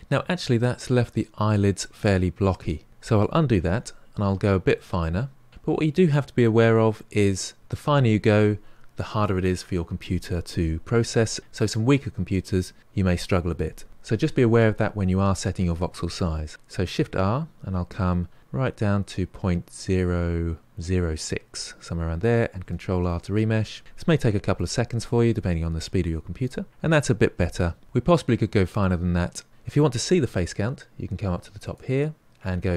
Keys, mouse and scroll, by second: 0.5-3.2 middle drag, 3.6 ctrl+z, 4.1-4.7 scroll down 4, 4.7-7.3 middle drag, 16.5-16.8 scroll down 3, 16.8 shift+r, 24.0 ctrl+r, 25.7-26.6 scroll up 3, 26.6 scroll up 2, 26.7-28.0 middle drag, 28.0-28.9 scroll down 5, 28.9 middle click, 31.6-32.7 drag.